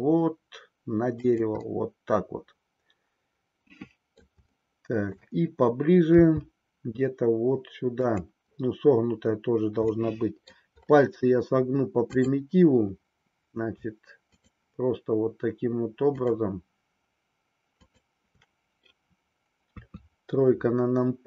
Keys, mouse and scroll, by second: 0.0 g, 1.6-4.3 middle drag, 4.6 shift+scroll up 1, 4.7-5.3 shift+middle drag, 6.1 g, 8.1 click, 10.0-10.7 middle drag, 12.1-13.3 drag, 14.3-15.6 shift+drag, 16.2-17.7 shift+drag, 17.8-19.2 shift+drag, 19.8 KP_3.